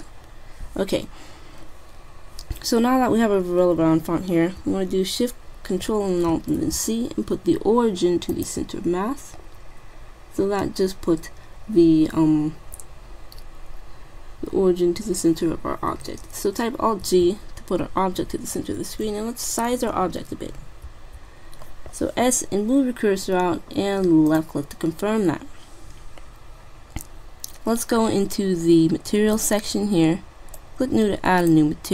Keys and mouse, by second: 0.0-1.6 drag, 9.7 middle click, 9.9 middle click, 10.7-12.2 middle drag, 17.2 alt+g, 18.2 middle click, 21.0 s, 27.6-29.3 middle drag, 29.3-31.9 drag.